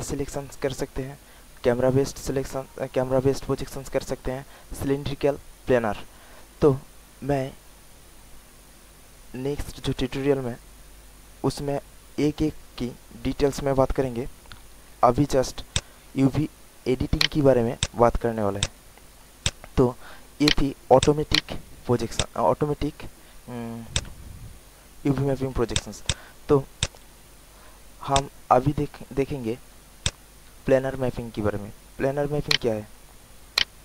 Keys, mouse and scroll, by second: 6.7 alt+middle click, 15.6 alt+click, 16.1 alt+middle click, 16.6 alt+click, 17.1 alt+right click, 17.7 alt+click, 18.2 alt+middle click, 18.5 alt+click, 19.0 alt+middle click, 19.4 alt+click, 19.9 alt+middle click, 20.4 alt+right click, 20.9 alt+click, 21.3 alt+right click, 21.7 alt+middle click, 22.1 alt+click, 23.1 alt+middle click, 23.9 alt+click, 25.3 alt+middle click, 25.7 alt+click, 26.0 alt+click, 26.8 alt+click, 28.1 click, 30.0 alt+click, 31.3 alt+middle click, 31.8 alt+middle click, 32.5 alt+right click, 33.2 alt+middle click, 33.5 alt+right click.